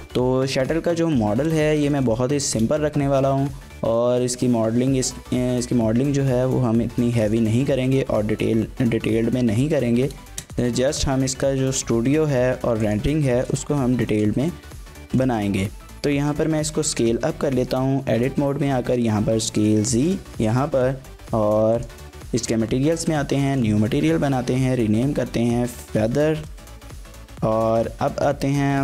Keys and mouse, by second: 0.0 middle click, 1.8 shift+middle drag, 2.1 middle click, 2.4 shift+a, 7.7 shift+middle click, 7.8 middle click, 9.5-12.1 typing, 10.4 KP_Enter, 12.8 click, 13.3 shift+middle drag, 14.1 shift+middle click, 15.1 shift+middle drag, 16.5 Tab, 16.9 s, 17.1 z, 20.0 click, 20.4 Tab, 21.8 click, 23.1 click, 23.6-27.3 shift+drag.